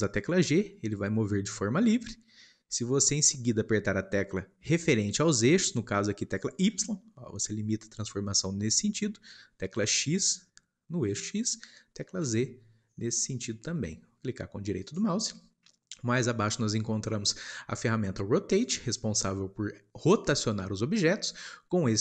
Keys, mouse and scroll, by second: 0.5 g.